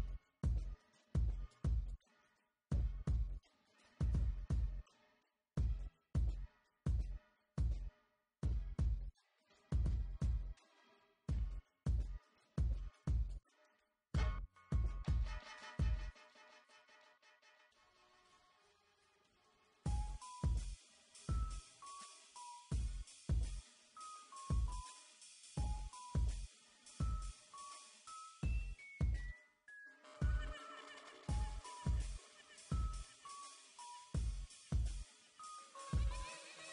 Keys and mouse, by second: 3.4 s, 4.9 z, 6.0 s, 6.7 click, 7.3 KP_1, 9.1-10.8 typing, 12.7 Tab, 14.4-15.8 middle drag, 17.0 middle click, 17.3 KP_7, 18.2 Tab, 20.5 e, 21.8 e, 23.5 e, 24.0 KP_5, 24.3 Tab, 26.6 KP_1, 27.0 KP_5, 27.2 z, 27.8 Tab, 28.2 ctrl+r, 30.4 ctrl+r, 32.0 ctrl+r, 32.6 ctrl+r, 33.3 ctrl+r, 34.1 ctrl+r, 35.2 ctrl+r, 35.9 ctrl+r.